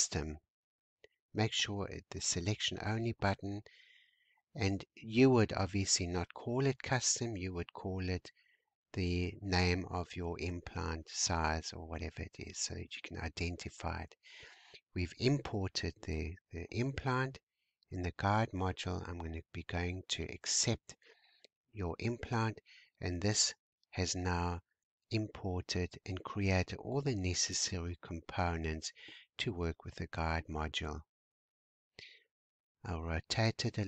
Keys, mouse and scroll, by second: 4.1-5.0 scroll down 2, 5.2 x, 6.9-9.9 drag, 14.6-15.8 scroll down 2, 15.8 n, 18.8-19.4 scroll down 2, 20.1-21.0 scroll up 1, 21.2 click, 22.1-22.6 scroll up 2, 24.2 scroll up 1, 24.3-25.2 scroll down 2, 25.2 click, 26.4-27.0 scroll up 4, 27.0-27.4 scroll down 3, 28.0-29.0 drag, 29.5 middle click, 30.2-30.5 scroll down 1, 30.5 click, 31.1-32.5 middle drag, 32.5 r, 33.6 shift+middle click.